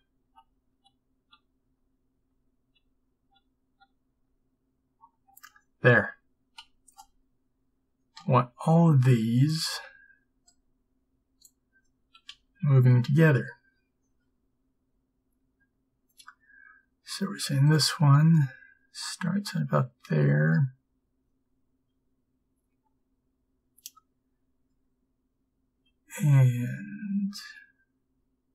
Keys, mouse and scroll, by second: 0.3 ctrl+z, 0.8 ctrl+z, 1.3 ctrl+z, 1.7 ctrl+z, 2.2 ctrl+z, 2.7 ctrl+z, 3.3 ctrl+z, 3.8 ctrl+z, 4.2 ctrl+z, 6.7 a, 12.4 b, 12.4 g, 26.5 g.